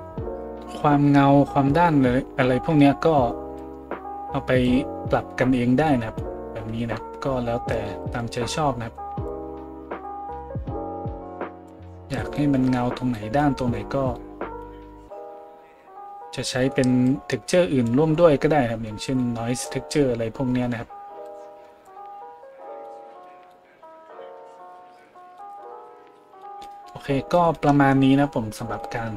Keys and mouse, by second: 5.9 right click.